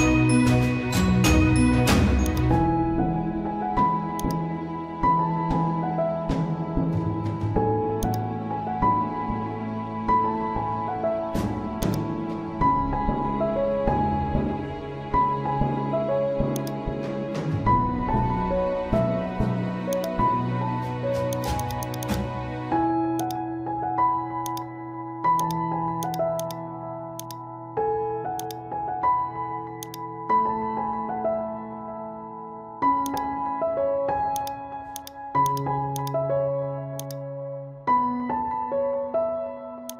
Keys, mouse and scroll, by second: 0.9-1.3 typing, 2.2 click, 3.5 typing, 4.2 click, 5.5 ctrl+z, 8.0 click, 9.9 ctrl+z, 10.8 ], 11.8 click, 13.0-14.3 scroll down 1, 16.6 click, 17.6-19.4 scroll down 1, 19.9 click, 25.0 right click, 25.4-33.1 drag, 33.7 right click, 35.0-39.9 drag, 36.2 typing.